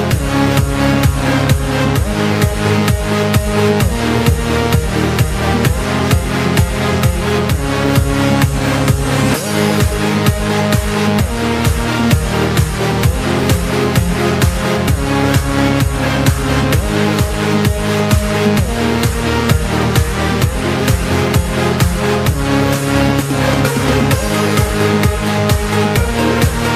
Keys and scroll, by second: 15.8 s, 21.1 z, 25.0 p.